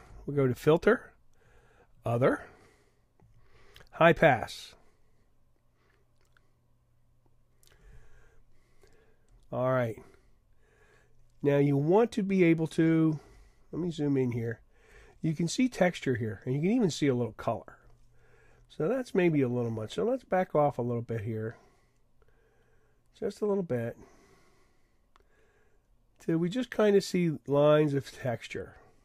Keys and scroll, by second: 13.3 super+=, 14.2 super+=.